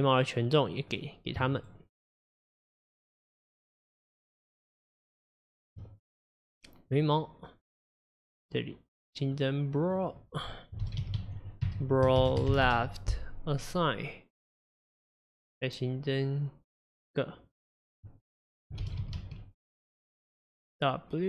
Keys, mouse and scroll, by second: 0.5 middle click, 1.0-1.6 scroll up 1, 1.6 scroll up 1, 1.6 shift+click, 2.2 shift+click, 2.8 shift+click, 3.1 shift+click, 3.8 shift+click, 4.8 shift+click, 5.6 shift+click, 6.4-8.3 middle drag, 8.3 click, 9.4 click, 10.0-13.1 drag, 13.7-16.7 drag, 16.9 click, 17.7-20.7 drag.